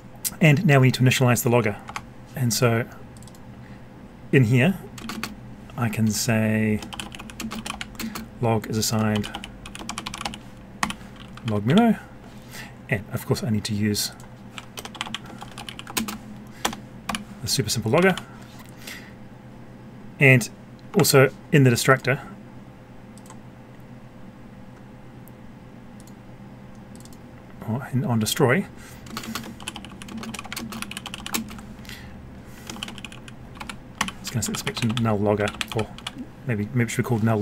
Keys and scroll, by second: 1.8 F12, 15.9 ctrl+space, 20.9 F12, 31.3 ctrl+space.